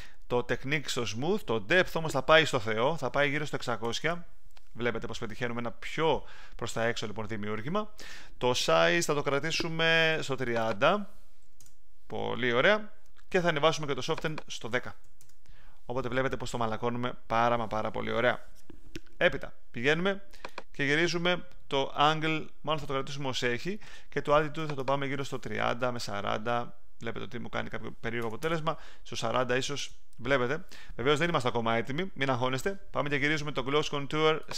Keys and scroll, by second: 3.4-4.3 typing, 11.1-12.1 typing, 14.7-15.6 typing, 25.4-26.2 typing, 28.2 BackSpace, 29.1 4, 29.7 0.